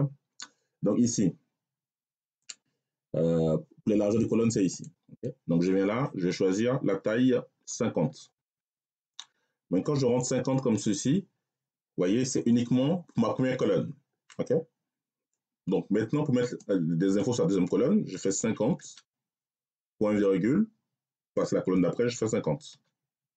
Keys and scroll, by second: 7.9 5, 8.3 0, 10.5 Return, 18.3 5, 18.6 0, 20.0 ., 21.9 5, 22.6 0.